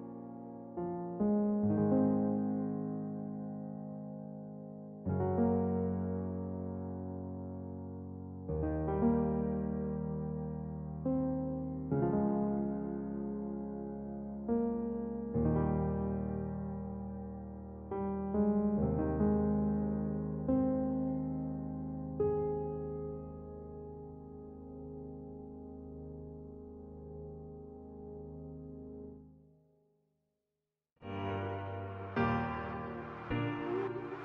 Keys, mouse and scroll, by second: 6.3-11.8 middle drag, 17.1-18.1 middle drag, 18.1 a, 19.6 middle click, 20.1 middle click, 21.0-23.8 middle drag, 23.8 k.